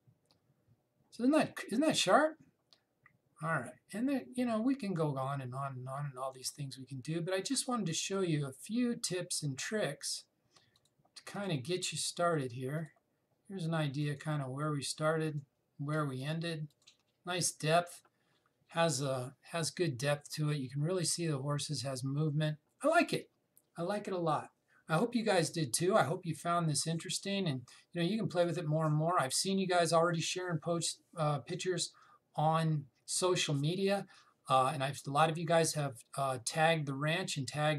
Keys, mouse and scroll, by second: 5.6 click, 11.4 click.